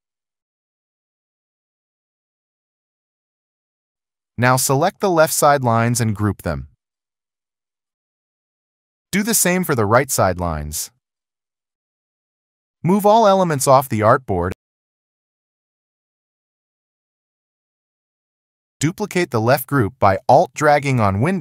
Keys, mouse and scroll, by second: 0.1 alt+click, 0.9 alt+click, 1.8 alt+click, 2.6 alt+click, 3.1 alt+click, 3.6 ctrl+0, 12.3 alt+scroll, 18.9 alt+click.